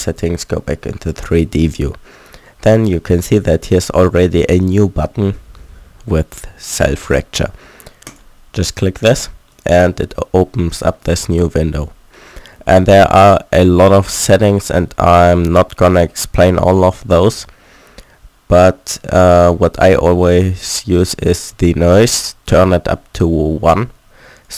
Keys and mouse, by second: 8.1 click.